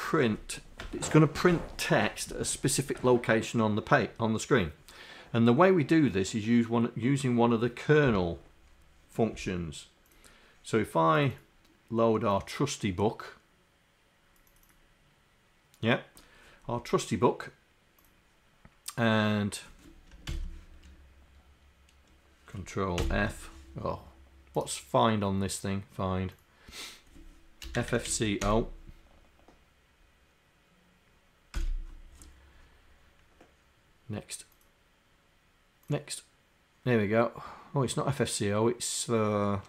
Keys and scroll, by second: 20.3 ctrl+f, 27.8 Up, 27.8 d, 28.1 c, 31.6 Return.